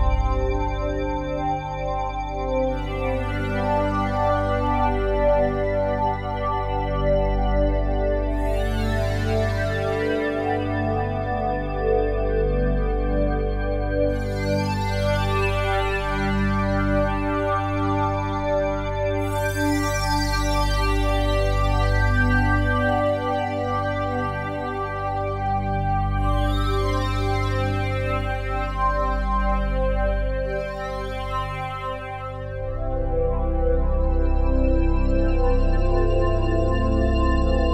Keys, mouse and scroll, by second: 0.4 alt+click, 2.0 click, 5.3 click, 5.4-8.5 drag, 10.4 typing, 11.6 click, 13.2-14.5 ctrl+alt+drag, 20.1 typing, 20.7 Return, 23.1 ctrl+s, 24.5-27.5 ctrl+alt+drag, 28.1-31.2 alt+drag, 31.6-36.6 ctrl+alt+drag, 36.7-37.4 typing, 37.6 Return.